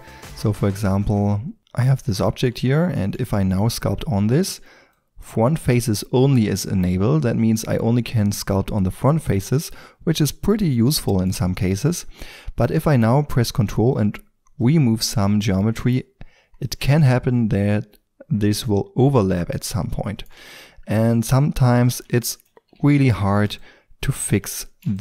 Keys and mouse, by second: 0.0 Tab, 4.9-9.6 drag, 10.8-13.9 middle drag, 13.9-17.0 drag, 17.0-19.3 middle drag, 20.4-25.0 drag, 22.7 f.